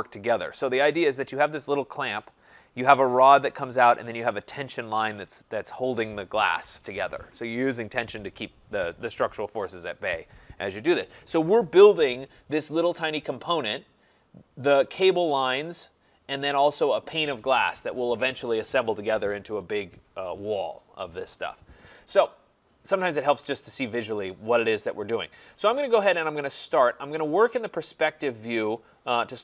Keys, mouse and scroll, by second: 23.2 click, 27.6 click, 27.8 click, 28.7-29.4 scroll.